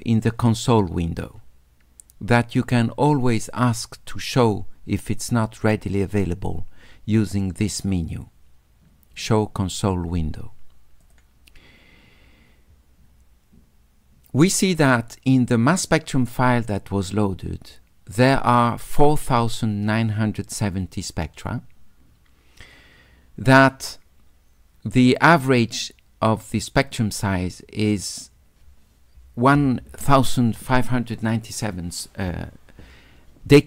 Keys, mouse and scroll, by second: 3.4 click, 11.0 click.